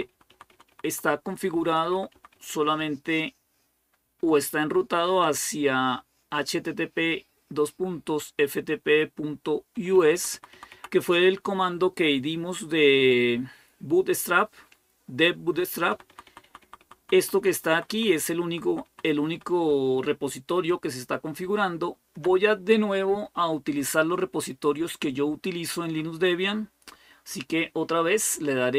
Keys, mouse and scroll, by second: 0.1 Right, 0.3 Right, 0.5 Right, 0.7 Right, 0.9 Right, 1.1 Right, 1.3 Right, 1.5 Right, 1.7 Right, 1.9 Right, 2.1 Right, 2.5 Right, 2.8 Right, 9.6 Right, 9.8 Right, 9.9 Right, 10.1 Right, 10.3 Right, 15.7 Right, 15.9 Right, 16.1 Right, 16.2 Right, 16.4 Right, 16.6 Right, 16.8 Right, 17.0 Right, 17.2 Right, 17.3 Right, 17.5 Right, 17.7 Right, 17.9 Right, 18.2 Right, 18.4 Right, 18.9 Right, 19.0 Right, 19.5 Home, 20.1-22.0 Left, 22.3 Left.